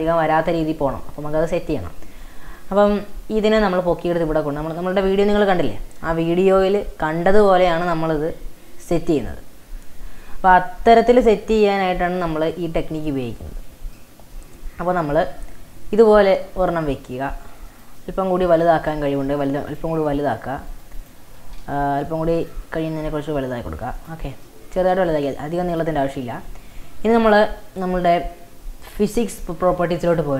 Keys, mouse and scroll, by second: 0.7-1.1 scroll down 4, 1.5 scroll up 1, 1.7-3.9 shift+middle drag, 3.9 g, 13.6-14.0 scroll up 2, 14.0-17.4 shift+middle drag, 17.4 s, 18.0-18.9 middle drag, 18.9 Tab, 19.3 middle click, 19.5 3, 19.7 click, 20.0 e, 21.6 ctrl+z, 21.9 ctrl+z, 22.4 click, 22.7 e, 24.3 Tab, 24.5-25.7 middle drag, 25.7 click, 26.5-27.1 scroll down 1, 30.0-30.3 drag.